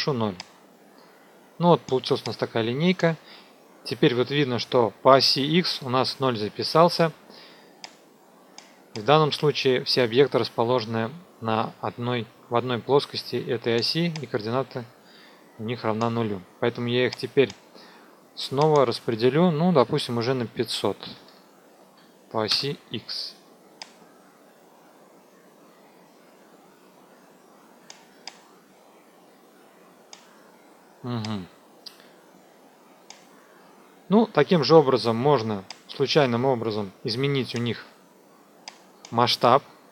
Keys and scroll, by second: 3.6 F2, 19.8 KP_5, 19.9 KP_0, 21.1 Delete, 22.4 Return.